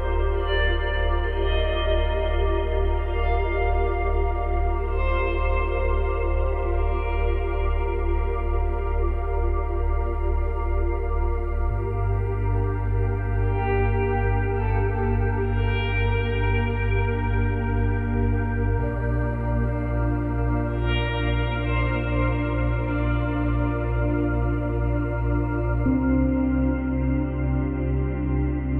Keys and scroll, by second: 1.5 space, 13.1 space, 18.9 space, 22.0 ctrl+z.